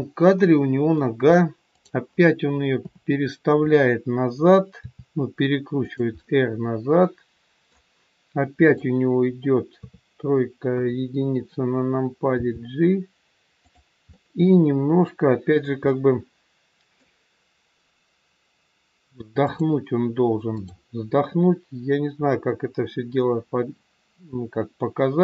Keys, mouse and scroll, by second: 1.0 middle click, 1.6 click, 2.7 KP_7, 4.9 r, 6.1 middle click, 8.5 click, 9.7 KP_3, 10.7 KP_1, 12.2 g, 14.1 middle click, 19.3 click, 20.4 click, 22.0 KP_1.